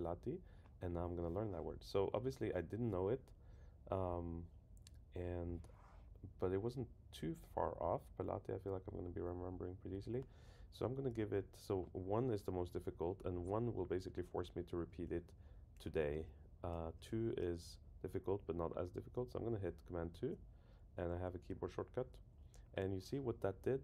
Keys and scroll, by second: 20.0 super+2.